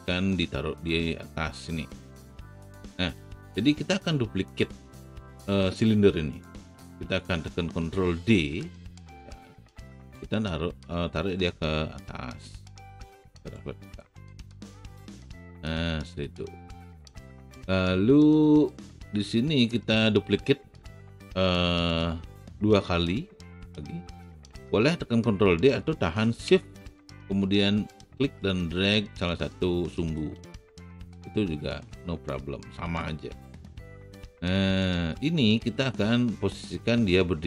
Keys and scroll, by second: 3.1 w, 8.2 ctrl+d.